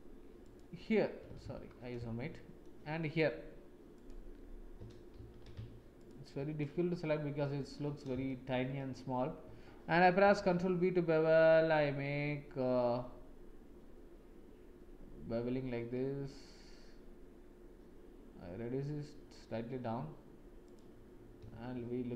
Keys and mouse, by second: 0.4 shift+click, 1.4 ctrl+z, 2.3 shift+middle click, 3.9 shift+click, 5.1 ctrl+z, 6.6-7.4 middle drag, 8.2 shift+click, 10.2 ctrl+b, 21.6 Tab.